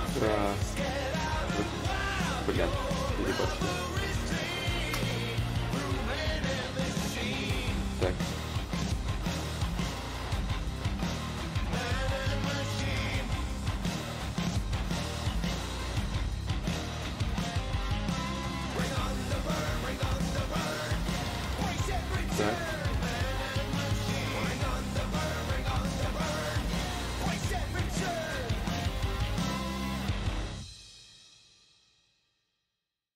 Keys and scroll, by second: 6.3 ctrl+z, 9.9-10.6 typing, 21.9-24.1 typing, 32.2 s.